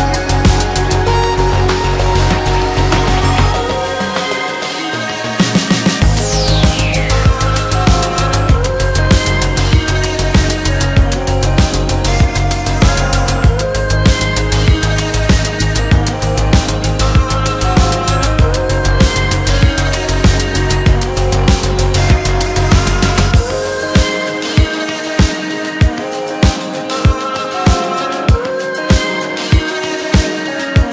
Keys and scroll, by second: 10.1 ctrl+a, 12.6 ctrl+g, 14.5 ctrl+shift+a.